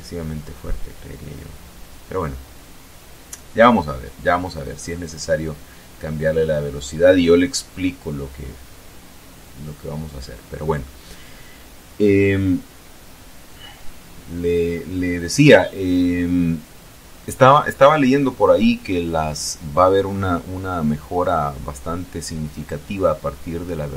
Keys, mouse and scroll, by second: 3.5 scroll down 2, 4.0-10.2 drag.